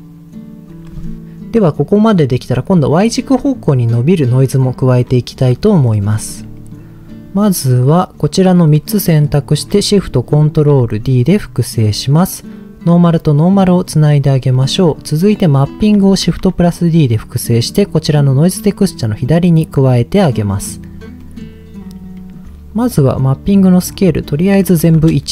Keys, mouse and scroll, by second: 1.6 middle click, 5.0-5.7 scroll down 3, 5.7 middle click, 6.1 middle click, 6.6 middle click, 7.6 click, 8.6 scroll down 1, 9.0 middle click, 9.2-9.6 scroll down 1, 10.3 ctrl+shift+d, 11.8 click, 12.8 click, 13.8-14.2 scroll down 2, 14.5 middle click, 14.5-14.8 scroll down 1, 15.3 click, 16.2 shift+d, 17.6 click, 18.7-20.2 drag, 20.8 scroll up 2, 21.2 middle click, 21.5-22.7 scroll up 6, 22.1 middle click, 23.4-25.0 drag.